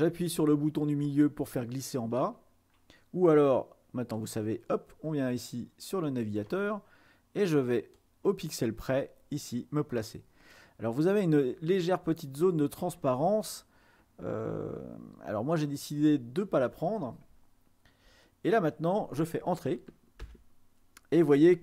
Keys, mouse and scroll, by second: 2.0-3.3 middle drag, 4.3-6.5 drag, 6.7 click, 8.0-13.4 drag, 14.8-17.1 ctrl+scroll down 2, 18.1-19.2 ctrl+scroll down 2, 20.3 Return.